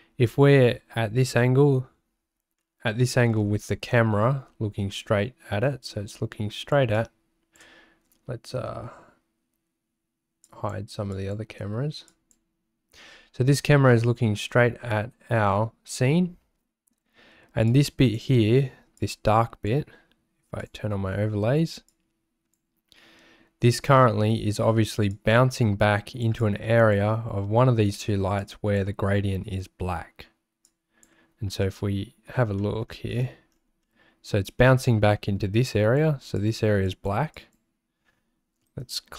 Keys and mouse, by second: 2.6 shift+middle click, 2.7 shift+click, 3.9 shift+click, 5.9 click, 6.9 click, 10.4 click, 11.1 click, 12.1 click, 14.9 shift+middle click, 17.7 click, 19.0 click, 20.6 click, 21.9 click, 25.1-26.2 drag, 26.4 click, 28.4 click, 30.6 click, 31.6 middle click, 32.6 middle click, 33.8 middle click, 34.8 shift+middle click, 35.7 click, 36.4 click, 36.8 click, 37.3 click, 38.8 ctrl+alt+shift+2.